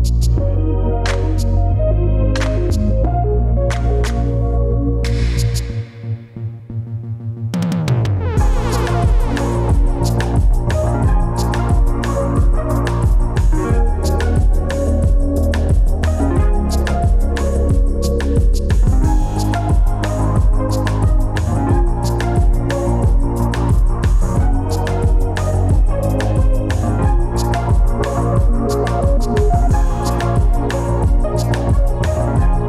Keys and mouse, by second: 3.7 shift+a, 23.5 alt+z, 24.3 alt+z, 24.8 Tab, 25.3 Tab, 27.1 g, 32.4 r.